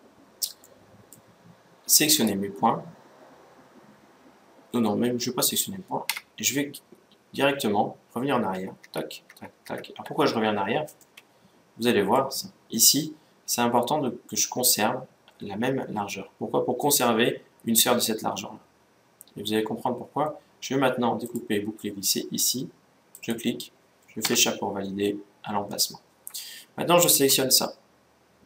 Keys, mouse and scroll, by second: 0.4-2.0 middle drag, 1.8-3.6 right drag, 5.8 a, 8.5 ctrl+z, 9.0 ctrl+z, 9.4 ctrl+z, 10.7-12.4 middle drag, 21.0-22.7 drag.